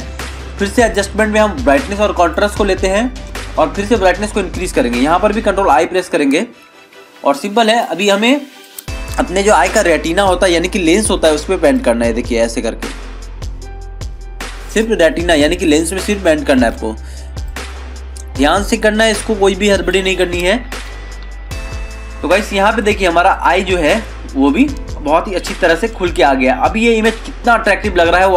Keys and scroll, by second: 6.0 ctrl+i, 6.9 ctrl+=, 20.9 ctrl+-, 21.2 ctrl+0, 21.5 ctrl+-, 26.8 ctrl+=.